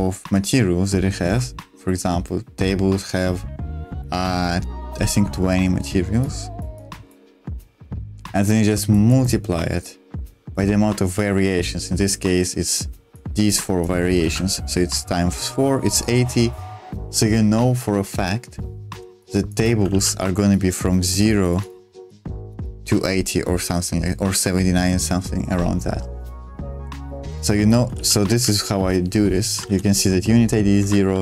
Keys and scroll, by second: 5.0 ctrl+z, 14.3 ctrl+z, 19.1 space, 19.9 ctrl+z, 27.3 space, 27.9 ctrl+z, 28.3 super+1, 29.7 shift+v, 30.7 Escape, 31.1-31.2 typing.